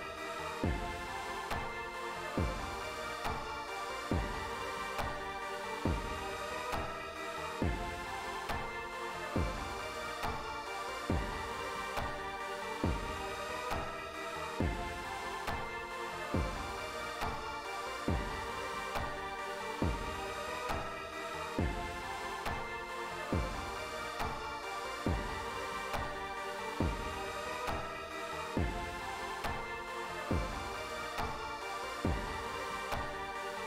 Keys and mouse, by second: 0.4 click, 5.6 click, 7.1 click, 7.9 click, 8.7 click, 9.4 click, 12.9 click, 13.6 click, 16.1 click, 16.9 click, 23.0 click, 26.7 click, 32.6-33.6 drag.